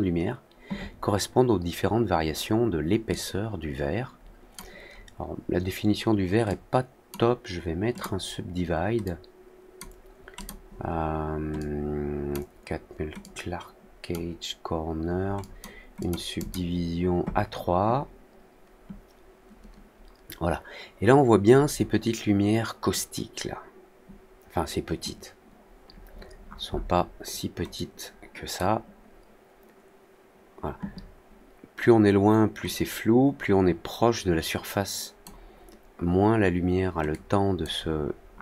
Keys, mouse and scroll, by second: 3.0-4.5 drag, 6.4-7.0 drag, 7.9 click, 9.0-9.7 drag, 10.3 click, 11.5-12.2 drag, 13.1-14.0 drag, 15.3 click, 15.9 click, 16.3 click, 26.1 middle click, 26.4 middle click, 27.7 click, 32.6-35.2 drag, 37.0-37.5 drag, 38.3 middle click.